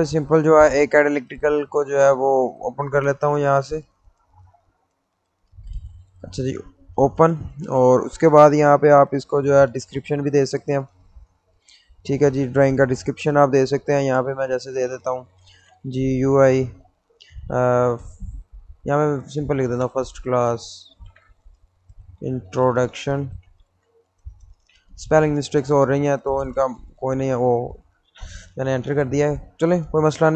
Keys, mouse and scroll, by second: 2.5 click, 5.0-6.9 drag, 9.7 click, 15.2-16.3 typing, 18.7 shift+Num_Lock, 18.9-24.2 typing, 25.2 Return.